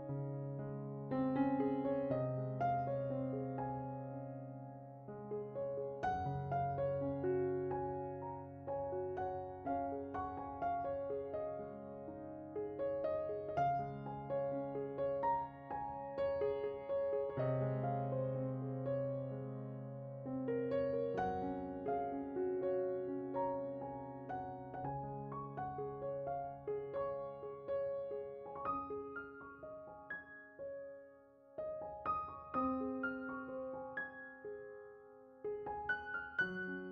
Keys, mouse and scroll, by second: 1.3 ctrl+shift+click, 4.7 click, 8.3-8.6 scroll down 3, 9.1 click, 10.0-10.5 middle drag, 10.5 drag, 10.7 right click, 11.1-11.5 scroll up 5, 11.9 click, 12.9-13.2 scroll up 8, 13.2 middle click, 14.2 click, 14.8 shift+a, 23.6 drag, 29.1 click, 33.2 click, 35.9 right click, 36.0 click.